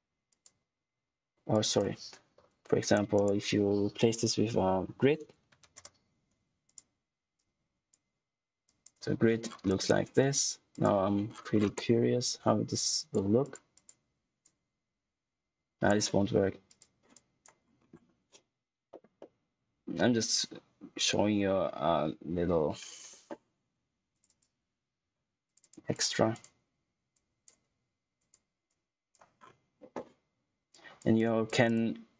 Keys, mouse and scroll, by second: 0.2 click, 2.7 right click, 4.9-6.0 typing, 6.6 click, 9.4 scroll down 1, 9.6 click, 11.2 scroll down 1, 11.7 click, 17.5-18.8 scroll up 1, 18.8 middle click, 24.0 click, 24.9 2, 25.4 click, 25.7 2, 25.9 click, 29.3 scroll down 1, 30.6 click.